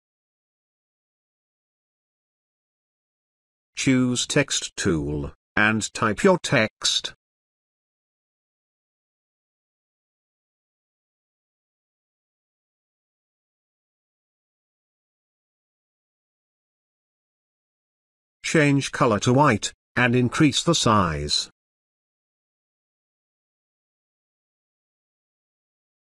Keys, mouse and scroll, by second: 3.1-4.7 drag, 10.7 Caps_Lock, 11.8-14.7 typing, 16.6-24.2 drag.